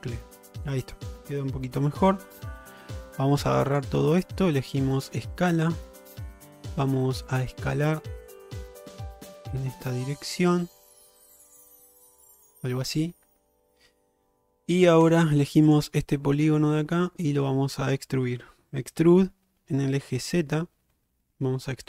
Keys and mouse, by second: 1.8 1, 3.6 click, 5.0 click, 7.4-12.5 drag, 15.1 3, 15.7 click, 16.2 middle click, 19.1 e.